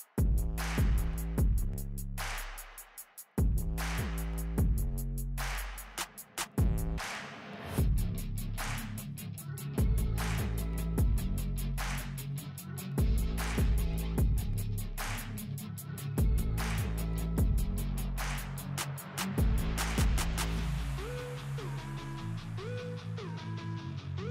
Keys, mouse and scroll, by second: 4.3-5.8 scroll up 1, 6.7 Right, 6.9 Up, 7.3 Right, 7.4 Up, 8.8 click, 9.2 F4, 11.8-14.0 drag, 14.0 Down, 18.0 Down, 19.2 click, 21.2 click.